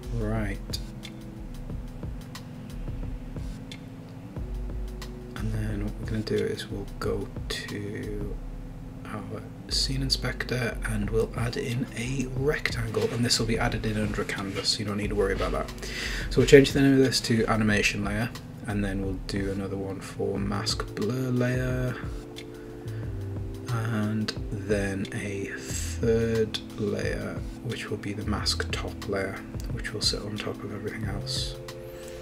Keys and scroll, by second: 16.7 Return, 17.2-20.4 typing, 21.2 super+d, 22.2 Return, 23.6-24.8 typing, 26.0 b, 27.5-30.0 typing, 30.3 super+d, 31.7 Return, 32.0 Right.